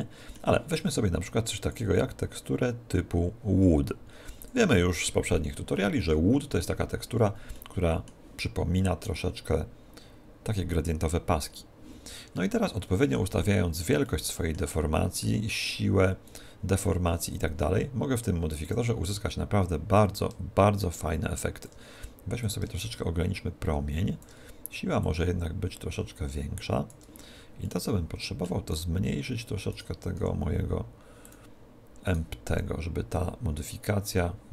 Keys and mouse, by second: 1.6 click, 5.8-9.3 middle drag, 12.4-16.5 middle drag, 16.3 right click, 18.6-21.9 drag, 22.4 click, 25.0 click, 27.6-29.8 middle drag, 29.8 right click, 30.2 s, 31.3 click, 32.1 right click, 32.5 s.